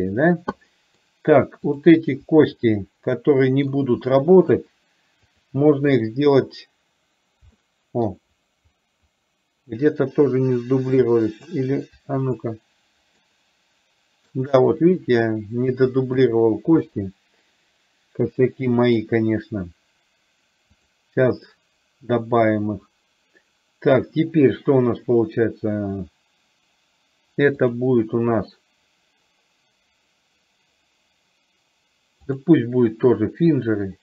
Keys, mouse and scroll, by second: 0.8 middle click, 1.8 click, 2.6 shift+click, 3.3 middle click, 5.9 shift+click, 7.6-8.1 middle drag, 11.3 middle click, 12.4 shift+click, 13.4 middle click, 17.0-19.0 middle drag, 20.9 click, 27.6-32.5 drag, 33.6 click.